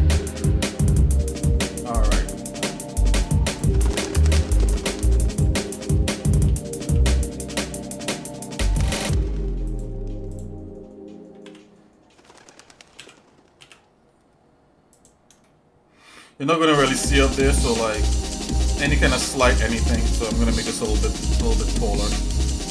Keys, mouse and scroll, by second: 1.9 shift+middle click, 2.4 ctrl+Tab, 3.5 click, 3.9 shift+click, 5.1 shift+click, 6.4 e, 10.5 click, 11.4 e, 15.4 shift+middle click, 16.5 shift+middle click, 17.3-17.7 scroll down 2, 18.0-19.5 shift+middle drag, 19.9 scroll up 2, 20.9 g.